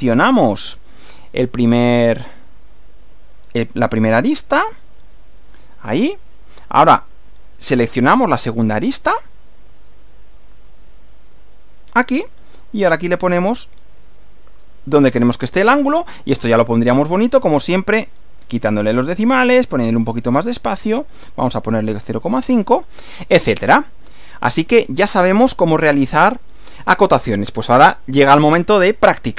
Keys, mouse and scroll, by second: 0.0 click, 4.0 click, 7.3 click, 11.4 click, 13.9 click, 17.4 click, 18.0-18.6 scroll down 2, 19.5-20.2 drag, 20.5 click, 21.7-22.9 typing, 23.8 click, 24.2 scroll down 2.